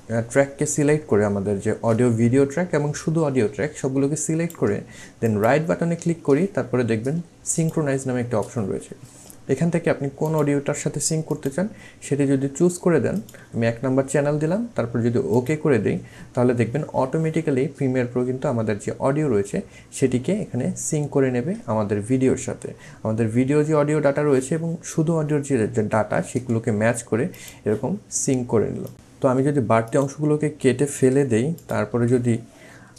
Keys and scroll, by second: 26.3 c, 28.9 ctrl+z, 30.9 Delete.